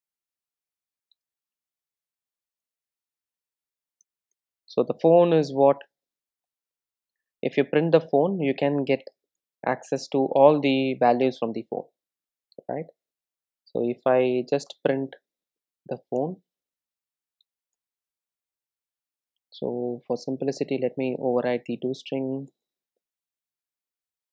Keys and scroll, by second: 9.6 Return, 16.2 Tab, 17.7 Tab, 17.7 Return, 19.7 super+e, 23.5 super+n.